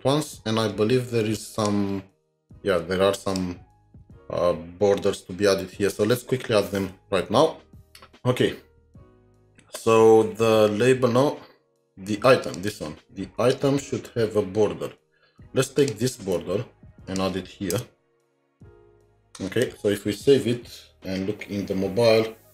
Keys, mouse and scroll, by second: 11.6 alt+Tab, 11.6 scroll up 1, 16.0 scroll, 16.2 typing, 17.7 Return, 18.0 typing.